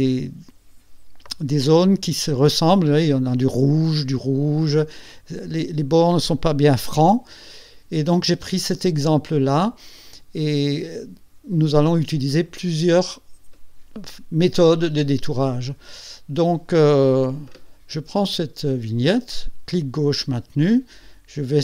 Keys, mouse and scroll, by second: 17.2 Escape, 18.3-21.6 drag.